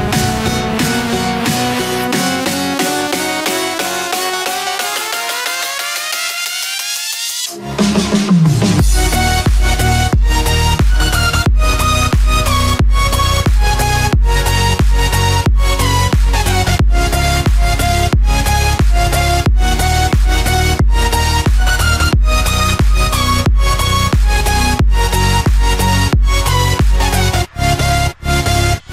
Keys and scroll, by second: 13.5 ctrl+-, 18.9 ctrl+0, 19.5 ctrl+=.